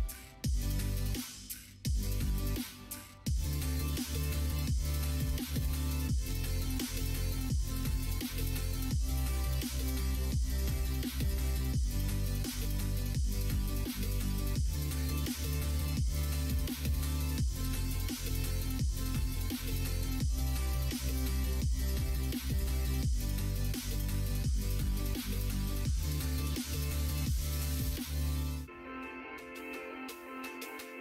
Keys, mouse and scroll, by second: 1.9-2.9 middle drag, 4.0 shift+click, 5.1 1, 5.9 2, 6.7 shift+click, 7.6 f, 8.2 click, 8.6 shift+click, 9.5 f, 10.6 shift+click, 11.3 middle click, 12.0 click, 12.9 f, 13.9 click, 14.2 shift+click, 14.7 f, 15.5 click, 16.1 shift+click, 16.5 f, 17.7 shift+click, 18.8 click, 19.1 shift+click, 19.7 f, 20.2 middle click, 22.2 click, 22.6 middle click, 25.9 shift+click, 27.4 click, 28.7 shift+click.